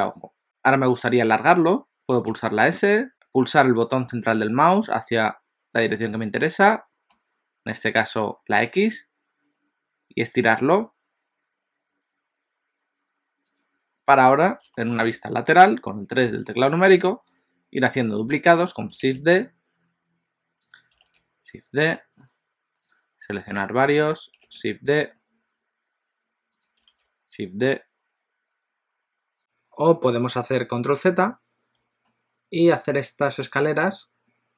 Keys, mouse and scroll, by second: 2.3 s, 14.8 shift+middle click, 16.2 KP_3, 19.0 shift+d, 21.1 shift+d, 23.7 shift+click, 24.2 shift+click, 24.5 shift+d, 27.0 shift+d, 29.4 ctrl+z, 32.0 shift+middle click.